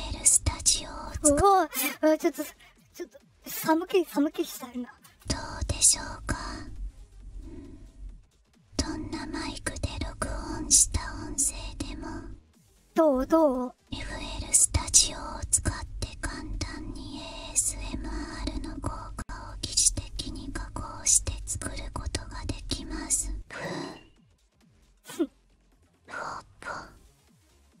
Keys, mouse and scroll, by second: 1.2 space, 5.0 space, 5.8-21.5 drag, 24.7-27.8 drag.